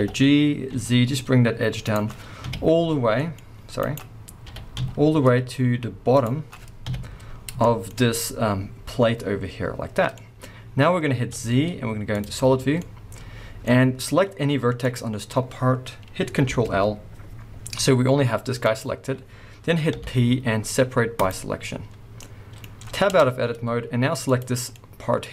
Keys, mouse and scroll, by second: 0.0 g, 3.9 right click, 4.4 g, 6.2 click, 6.9 KP_1, 7.3 scroll down 1, 7.6 shift+middle click, 8.4-9.9 scroll up 1, 9.9 scroll down 1, 10.2 middle click, 10.7-11.4 scroll up 1, 11.4 z, 12.7 scroll down 1, 12.8 middle click, 13.7-14.8 scroll up 1, 14.8 click, 16.3 ctrl+l, 17.8 g, 18.7 right click, 19.9 p, 22.1-24.2 middle drag, 23.0 Tab, 24.2 click, 24.7-25.3 middle drag.